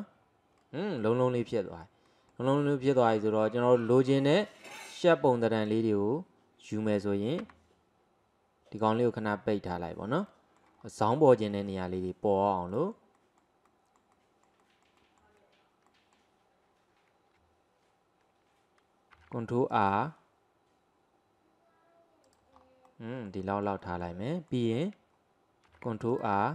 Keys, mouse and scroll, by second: 0.0 click, 0.7-4.7 middle drag, 4.7 click, 5.7 click, 6.7 click, 7.5 Tab, 8.9 click, 10.3 middle click, 10.8 scroll up 1, 11.1-19.1 middle drag, 19.2 ctrl+r, 22.6-22.9 scroll up 1, 22.9-25.7 middle drag, 25.7 ctrl+r.